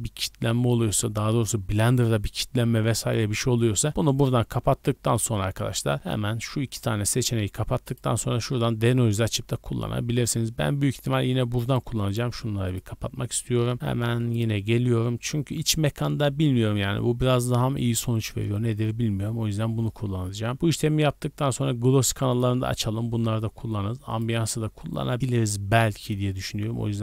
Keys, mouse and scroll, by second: 7.8 click, 10.8 click, 11.6 click, 12.6 click, 13.2 click, 14.2 click, 19.8 scroll down 2, 21.9 click, 21.9 scroll down 2, 23.4 scroll down 2, 24.1 click, 24.5 scroll down 2, 26.4-27.0 scroll down 4.